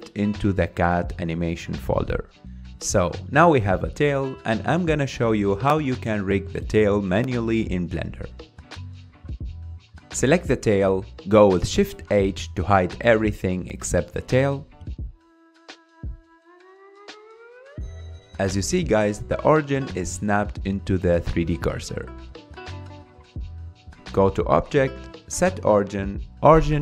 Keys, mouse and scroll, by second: 0.0 click, 4.9-6.4 scroll up 8, 6.4-7.4 drag, 7.9 click, 8.4 F5, 8.7-9.8 scroll up 3, 9.8 click, 10.3-12.3 middle drag, 12.3-13.5 scroll down 3, 14.4 shift+h, 15.9 KP_1, 17.3 KP_3, 18.4 scroll up 3, 18.8-20.9 shift+middle drag, 20.9 g, 21.7 r, 24.4-26.8 drag.